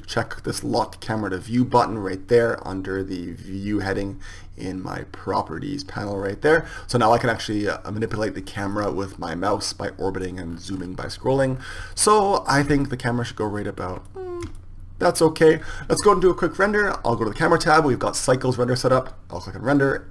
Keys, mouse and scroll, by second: 5.6-17.9 drag.